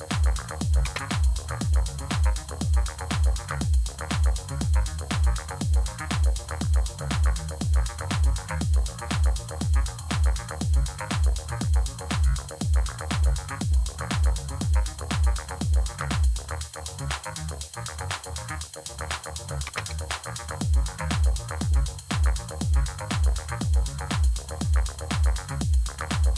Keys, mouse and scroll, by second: 0.7 space, 19.5 Tab.